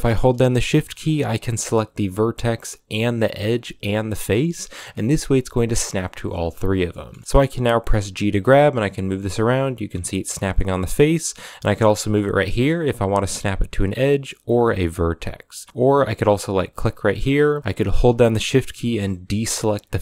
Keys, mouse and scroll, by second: 6.5 scroll down 3, 6.7 middle drag, 7.0 scroll up 4, 7.1 middle click, 7.7 g.